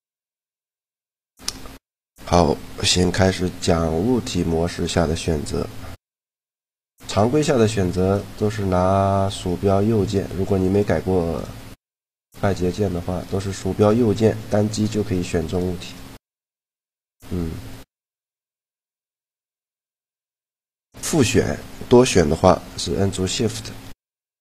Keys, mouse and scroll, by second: 0.4 middle click, 1.1 Tab, 8.4-9.8 middle drag, 9.8-17.7 right drag, 17.7-19.6 middle drag, 19.6-21.3 right drag, 21.3 middle click, 24.0-24.4 right drag.